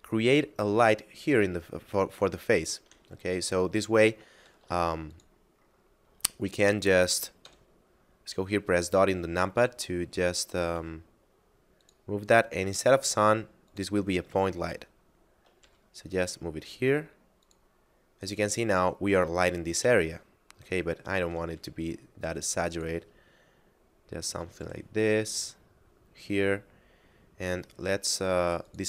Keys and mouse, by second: 4.4 shift+d, 5.1 click, 7.3 KP_Decimal, 8.7 shift+middle click, 10.0 shift+middle click, 10.7 g, 11.8 click, 14.7 shift+middle click, 15.6 g, 17.4 click, 20.1 shift+middle click, 21.5 g, 22.7 click, 23.3 shift+middle click, 24.6 g, 25.3 click, 28.6 click.